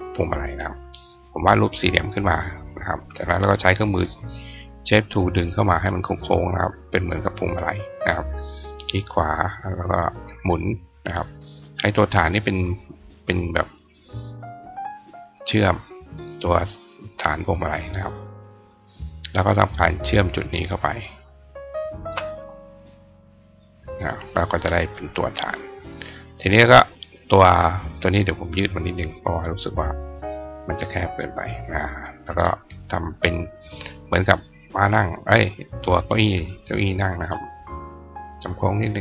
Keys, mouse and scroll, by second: 0.3-1.8 drag, 1.9 click, 3.2 click, 5.2 click, 6.4 click, 7.2 click, 8.8-10.1 drag, 10.4 click, 11.0 click, 11.3 right click, 11.7 click, 12.5-14.2 drag, 15.3-15.9 drag, 16.1 click, 17.4-18.4 drag, 19.8 click, 20.4 shift+click, 21.8 shift+click, 23.3 click, 23.8 click, 26.5 click, 28.4 click, 28.9-29.7 drag, 30.5-31.5 drag, 31.8 click, 33.2 click, 34.7-36.1 drag, 37.0 click, 38.2 click.